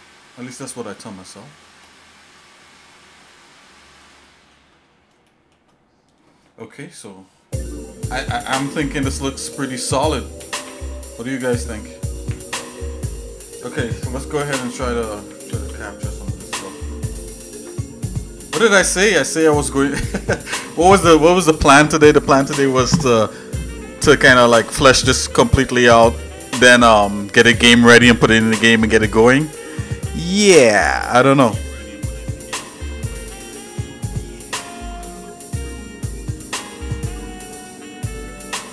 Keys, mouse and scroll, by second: 0.9 middle click, 1.4 shift+middle click, 1.9 middle click, 2.7 shift+middle click, 3.3 middle click, 4.2 shift+middle click, 5.2 shift+middle click, 15.6 ctrl+s, 16.6 shift+middle click, 33.0 shift+middle click, 33.5 middle click, 34.4 shift+middle click, 35.9 shift+middle click, 36.6 scroll down 1, 37.1 middle click, 37.8 shift+middle click.